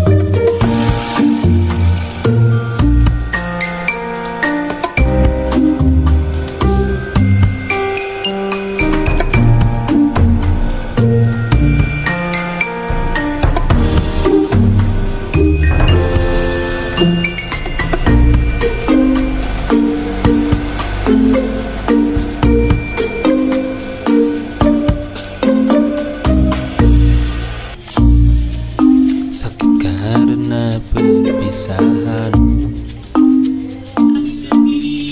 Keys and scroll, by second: 1.5 z, 7.9-10.5 typing, 14.1 z, 15.3-16.4 typing, 19.3 ctrl+z, 30.3 z.